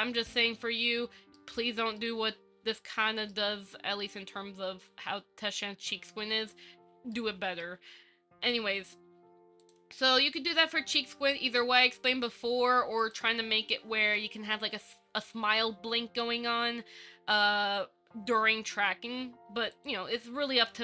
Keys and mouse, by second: 1.6 shift+middle click, 3.0 shift+middle click, 7.4 shift+middle click, 10.7 click.